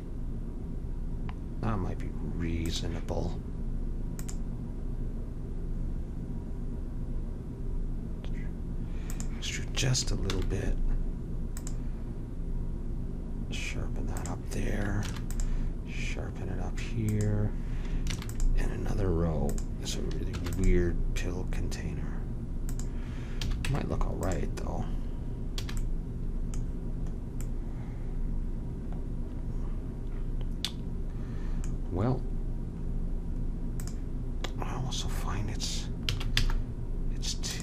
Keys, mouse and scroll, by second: 4.1-6.0 drag, 10.3 ctrl+r, 15.0 ctrl+r, 18.1 ctrl+r, 20.3 ctrl+r, 23.4 a, 23.6 Tab, 24.3 Tab, 25.6 a, 33.8-35.6 drag, 36.1 s.